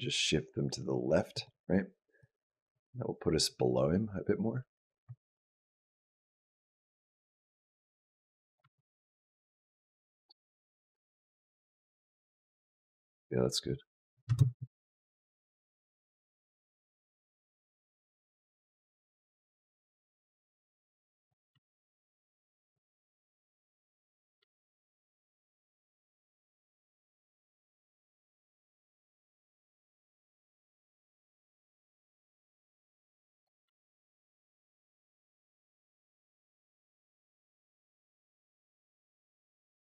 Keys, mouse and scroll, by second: 2.0 click, 8.4 space, 14.1 space, 14.8 click, 18.3 click, 21.3 space, 22.6 space, 23.2 click, 24.2 space, 31.4 space, 32.6 click, 33.5 space, 37.2 click.